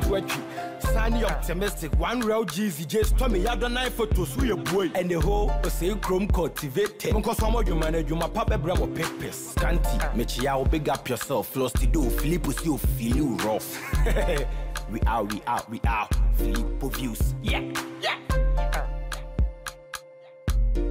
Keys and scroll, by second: 0.0 ctrl+t, 4.5 Return.